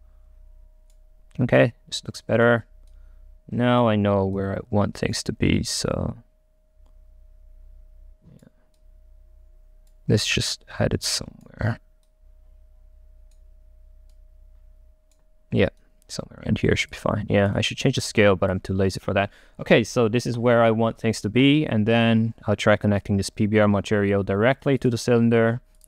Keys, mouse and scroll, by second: 0.1-1.6 right drag, 1.7-6.0 right drag, 17.0 click, 17.6 right click, 18.0-21.2 drag, 21.2-23.1 right drag, 23.1-25.8 drag.